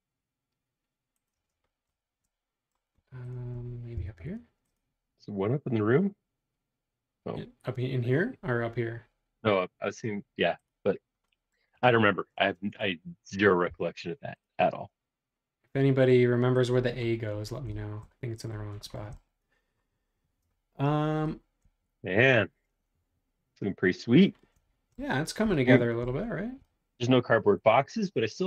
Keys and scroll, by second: 1.5 space, 4.0 m, 16.7 space.